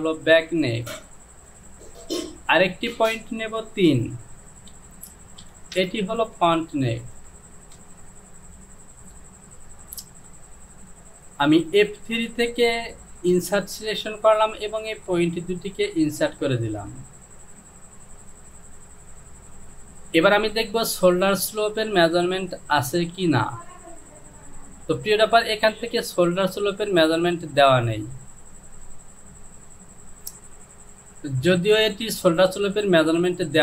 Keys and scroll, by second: 4.7 Down, 5.5 KP_3, 5.9 Return.